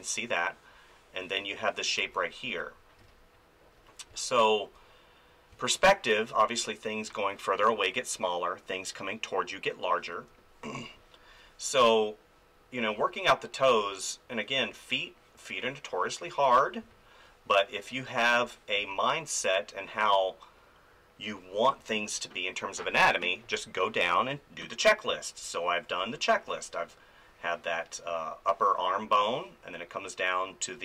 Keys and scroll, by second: 2.0 ctrl+z, 3.0 space, 4.1 space, 10.6 space, 12.9 space, 16.8 space, 18.8 space, 25.1 space.